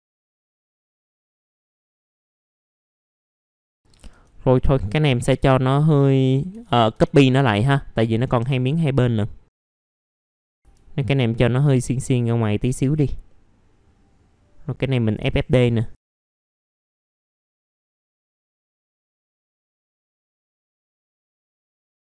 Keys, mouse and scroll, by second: 0.2 alt+middle click, 0.4 middle click, 0.6 alt+middle click, 0.8 middle click, 0.9 alt+middle click, 2.0 middle click, 2.3 scroll up 1, 2.5 click, 2.9 F4, 3.2 click, 3.5 typing, 3.8-4.1 scroll down 1, 5.3-6.4 drag, 6.6-6.9 scroll down 1, 7.6 shift+click, 8.7-9.5 scroll up 1, 9.5 click, 9.6 middle click, 9.6 scroll down 1, 9.8-12.8 drag, 11.1 w, 13.3 middle click, 14.8 click, 16.9 alt+middle click, 17.2 scroll down 1, 17.3 click, 17.7 ctrl+click, 18.2-20.0 drag, 20.1 alt+middle click, 20.3 scroll up 1, 20.5 click, 21.6 alt+middle click, 21.9 click.